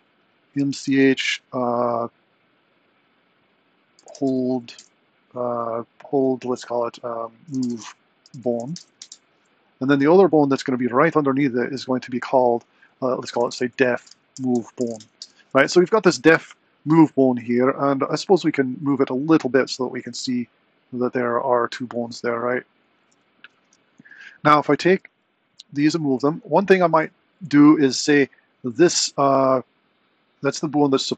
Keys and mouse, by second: 10.3 middle click, 11.9-15.6 drag, 18.7 g, 23.7 Tab, 24.5 click, 25.0 r, 28.4 click.